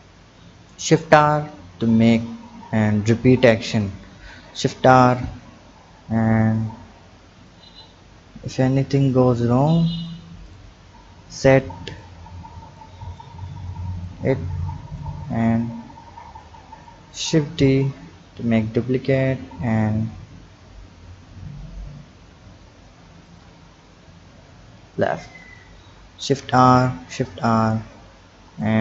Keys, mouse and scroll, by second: 1.1 shift+r, 4.4 shift+r, 6.3-7.8 drag, 7.8-8.6 scroll up 3, 9.0 click, 9.7 click, 10.7-11.0 scroll up 4, 11.6-15.2 drag, 15.2-16.4 scroll down 2, 16.4-17.7 drag, 17.7 shift+d, 23.7-24.9 scroll down 3, 24.9-26.2 drag, 26.2 shift+r, 26.9 shift+r, 28.6-28.8 drag.